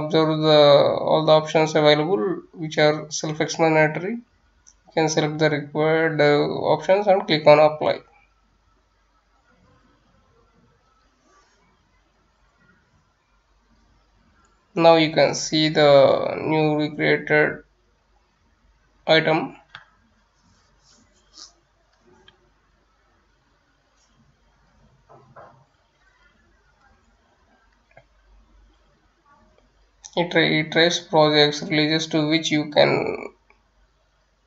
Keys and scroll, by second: 19.3 Return, 21.0-32.6 typing.